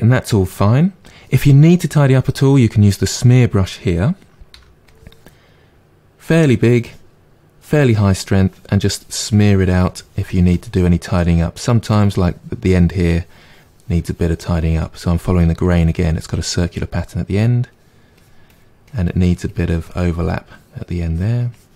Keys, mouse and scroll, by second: 2.8 click, 4.5 f, 8.3-10.7 drag, 10.7-12.6 middle drag, 12.6-16.7 drag, 16.7-18.1 middle drag, 18.1-20.2 drag, 20.2 middle click, 21.0 click.